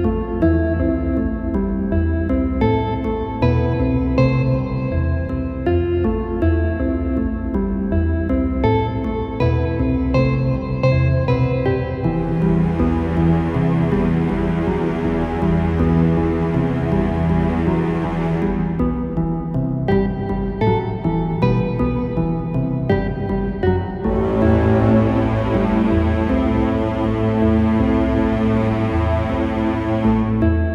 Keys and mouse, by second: 0.2 a, 0.6 a, 2.2 Tab, 3.1 Delete, 5.5-6.6 drag, 8.0 Tab, 9.0-10.1 right drag, 10.3-11.3 right drag, 12.1 right click, 13.5-15.7 right drag, 16.5-18.4 middle drag, 18.4 ctrl+r, 23.6 g, 25.4 click, 28.0-29.2 right drag, 28.3-29.3 drag, 29.9-30.7 right drag, 30.6-30.7 drag.